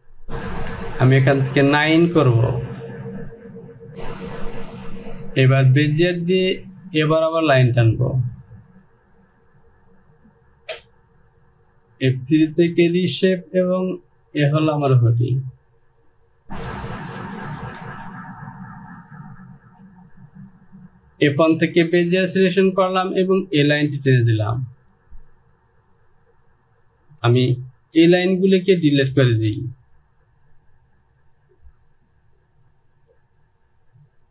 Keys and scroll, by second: 18.0 Home, 28.2 Delete.